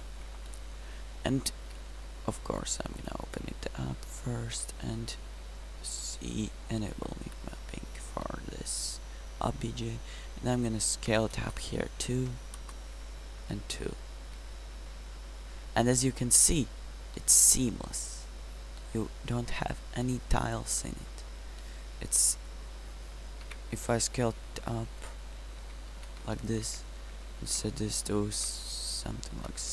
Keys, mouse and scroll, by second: 5.1 n, 7.3 n, 13.9-14.3 middle drag, 18.2 middle click, 18.3-19.2 middle drag, 19.4 middle click, 19.6 middle click, 19.8 middle click, 19.9-21.1 middle drag, 23.5 Tab, 23.9 s, 25.9 s, 26.7 Tab.